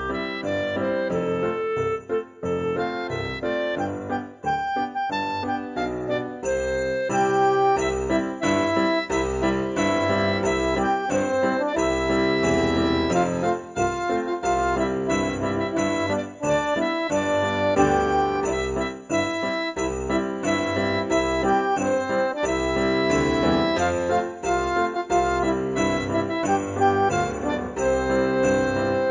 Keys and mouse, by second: 0.5 g, 1.0 z, 4.9 click, 5.3 ctrl+b, 9.9 click, 10.7 middle click, 11.6 Tab, 11.9 middle click, 13.1 Tab, 13.8 click, 14.3 middle click, 14.5 Tab, 15.6 click, 16.2 middle click, 18.2 alt+z, 18.7 click, 20.1 alt+z, 20.5 middle click, 22.1 shift+d, 23.6 z, 24.5 click, 24.9 p, 25.2 click, 26.8 Tab, 28.9 click.